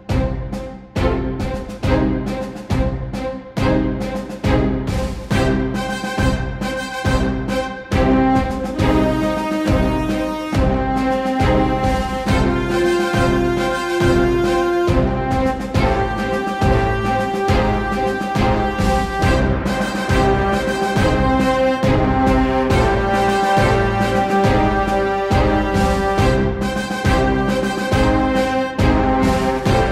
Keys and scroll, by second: 0.0-0.1 typing, 22.5 k.